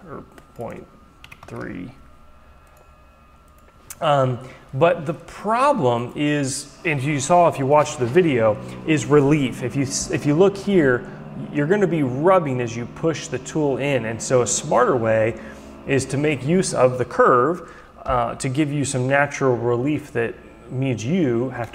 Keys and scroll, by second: 1.2 Delete, 1.5 Return.